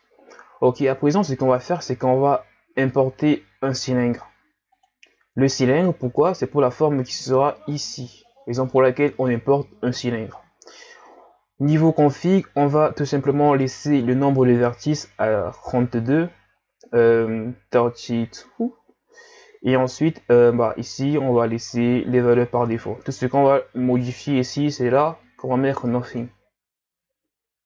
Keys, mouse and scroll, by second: 0.0-0.5 scroll down 2, 0.5-1.9 scroll up 1, 1.9 shift+a, 23.9-27.0 drag, 27.5 Tab.